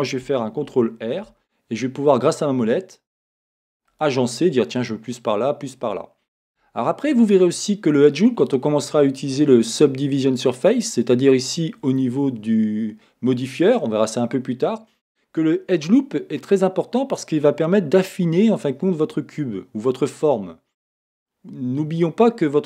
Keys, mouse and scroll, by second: 0.7 ctrl+r, 6.5 Escape, 6.5-11.3 drag, 7.3-11.9 middle drag, 11.9 click, 13.3-22.6 drag.